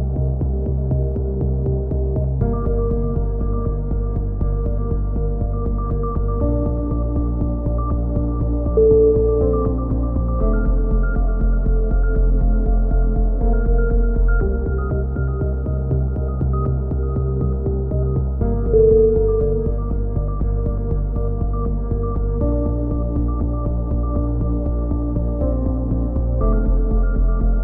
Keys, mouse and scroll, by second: 1.0 z, 1.3 a, 2.5-4.1 middle drag, 4.1 ctrl+KP_7, 4.4 z, 4.7 click, 5.2 click, 5.3 z, 5.8-6.8 drag, 5.8 z, 7.1 click, 8.7 a, 9.2 click, 10.7 KP_3, 11.7-12.7 drag, 12.7 right click, 12.9-14.1 drag, 13.6 KP_3, 14.3 click, 16.1 click, 16.8 a, 16.9-18.4 middle drag, 18.4-19.7 drag, 20.2-21.7 middle drag, 20.2 a, 23.8-24.8 drag, 25.7 KP_1.